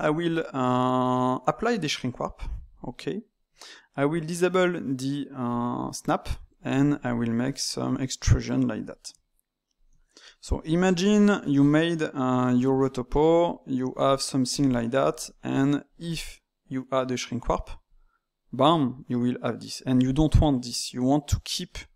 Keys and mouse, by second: 2.5-5.5 drag, 6.6 click, 7.5 middle click, 8.1 e, 9.1 e, 10.8-12.9 middle drag, 12.9 click, 13.3 click, 14.0 click, 14.6 click, 15.1-17.8 middle drag, 17.8-20.9 drag.